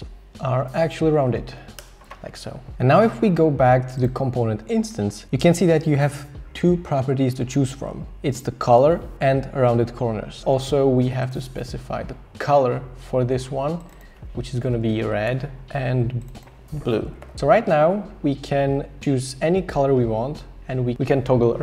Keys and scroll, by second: 0.9 shift+Up, 1.0 shift+Up, 1.2 shift+Up, 1.3 shift+Up, 1.4 shift+Up, 1.9 Left, 14.3-15.2 typing, 15.3 Return, 16.7-17.9 typing.